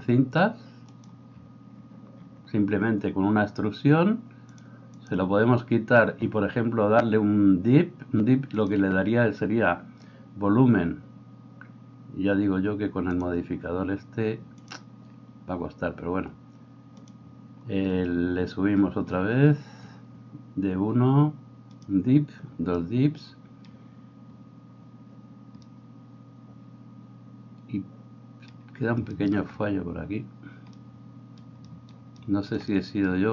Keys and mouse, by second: 1.1-4.5 middle drag, 4.5-13.2 drag, 13.2-14.6 middle drag, 14.6-17.1 drag, 17.1-21.8 middle drag, 21.8-31.5 drag, 31.5-33.3 shift+right drag.